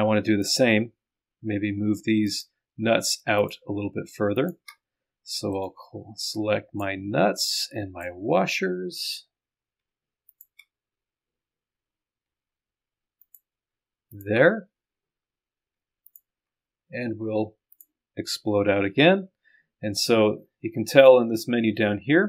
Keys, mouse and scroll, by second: 0.5 ctrl+click, 2.3 ctrl+click, 3.4 ctrl+click, 4.4 click, 4.8-5.5 scroll down 1, 5.7-7.2 middle drag, 7.4 right click, 7.5 middle click, 8.2-9.0 scroll down 2, 9.0 scroll up 1, 10.3 ctrl+scroll up 1, 13.3 ctrl+click, 14.2 ctrl+click, 14.5-15.2 scroll down 2, 15.2-15.6 scroll up 2, 16.1 ctrl+click, 17.8 click.